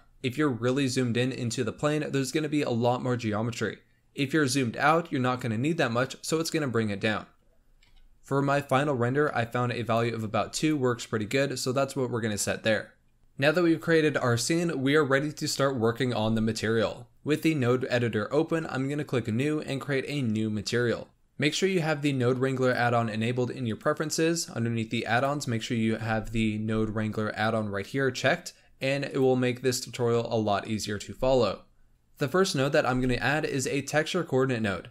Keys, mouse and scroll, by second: 0.0-0.6 scroll up 5, 0.6-1.1 middle drag, 1.1-3.9 scroll up 1, 3.9-4.7 scroll down 8, 7.8 KP_7, 8.7-9.7 scroll up 3, 9.8 click, 12.9 scroll down 1, 13.1 n, 19.2-21.1 drag, 22.5-25.6 drag, 32.8 shift+a.